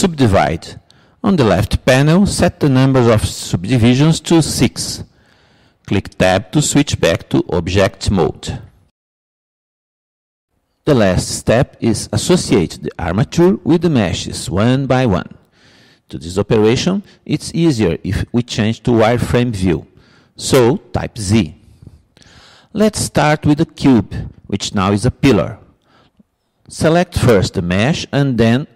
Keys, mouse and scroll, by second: 3.5-7.3 drag, 7.3 Tab, 21.7 z, 28.2-28.7 drag.